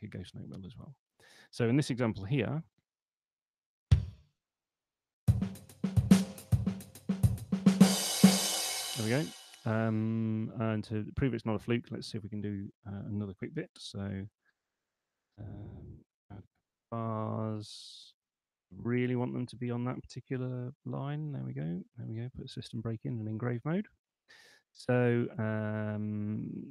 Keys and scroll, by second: 4.3 p, 8.5 space, 13.6-14.5 typing, 15.8-17.1 typing, 18.9 super+3, 20.5 shift+s, 21.9 super+2.